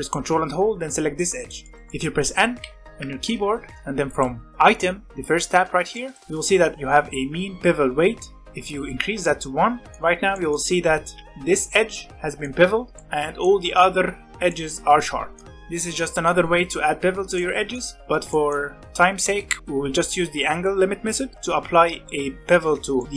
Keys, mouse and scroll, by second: 1.1-2.6 middle drag, 2.6 n, 4.0 click, 5.9-8.0 shift+middle drag, 8.7-9.9 drag, 9.9 shift+middle click, 10.0-11.1 scroll up 2, 10.3 shift+middle click, 11.1 Tab, 11.2-13.6 middle drag, 13.6-14.1 scroll down 3, 14.5-16.0 middle drag, 17.4-19.6 shift+middle drag, 21.0 click, 21.3-22.8 middle drag, 22.8 scroll down 1, 23.0-23.1 middle drag.